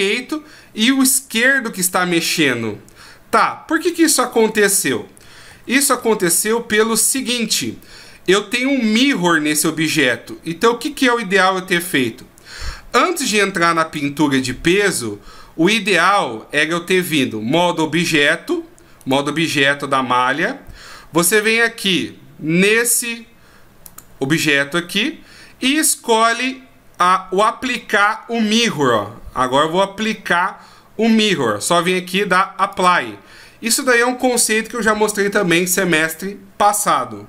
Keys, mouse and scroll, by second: 5.5 ctrl+z, 6.0 ctrl+z, 6.4 ctrl+z, 6.8 ctrl+z, 7.2 ctrl+z, 8.1-9.2 scroll down 2, 8.5-9.2 scroll up 1, 10.4 scroll up 1, 11.7 click, 19.0 right click, 23.9 click, 32.7 click.